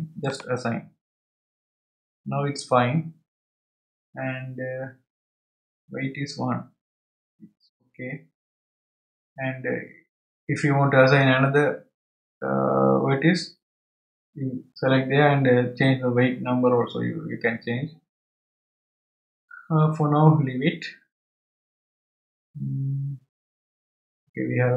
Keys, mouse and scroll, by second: 0.2-3.3 drag.